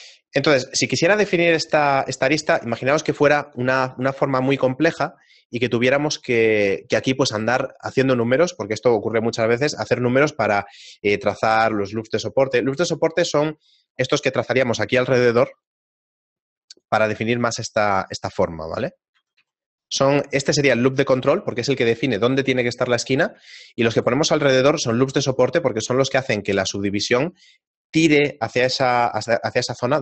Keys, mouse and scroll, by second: 0.8 ctrl+Tab, 1.1 ctrl+Tab, 2.1 alt+right click, 15.3 ctrl+r, 17.4 ctrl+r, 20.2 ctrl+z, 23.8 ctrl+r, 25.0 ctrl+r.